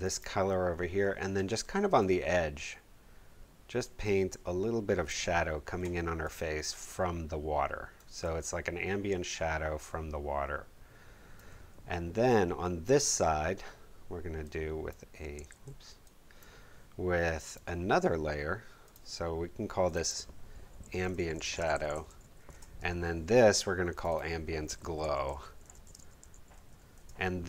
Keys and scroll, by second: 15.5 super+z, 20.5-22.8 typing, 24.5-27.1 typing.